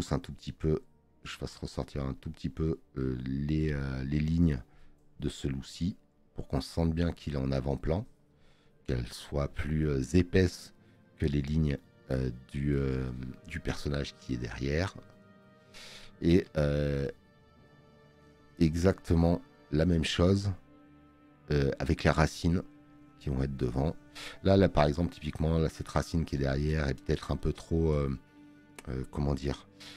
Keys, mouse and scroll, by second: 16.5 click, 27.8 space, 28.0 click.